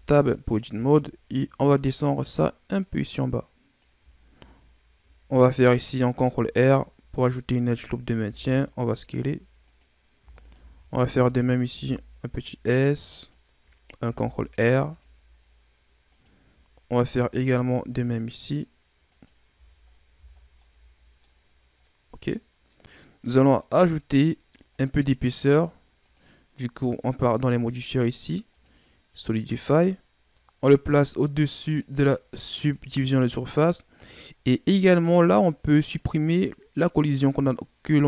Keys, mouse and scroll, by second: 0.6 a, 1.9-5.0 drag, 6.0 ctrl+r, 8.1 s, 10.3 alt+right click, 10.7-11.1 scroll down 3, 11.1-11.6 scroll up 1, 11.6 s, 14.0 ctrl+r, 16.8 ctrl+r, 19.4 Tab, 19.8-20.5 scroll down 5, 20.0 a, 20.5-21.3 middle drag, 21.3-21.7 scroll up 2, 21.7-22.9 middle drag, 22.9-23.2 scroll up 2, 23.2 right click, 24.6 click, 25.9-29.9 drag, 30.6-32.6 drag.